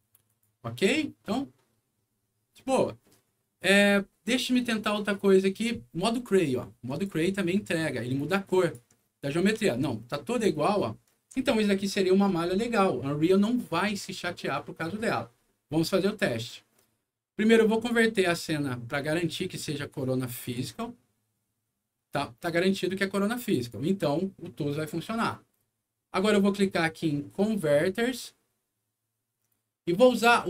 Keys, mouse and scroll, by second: 0.2 click, 1.2 middle click, 2.2 middle click, 3.0 middle click, 6.8 click, 8.4 click, 9.6-11.3 alt+middle drag, 17.7 click, 20.4 click, 23.5 click.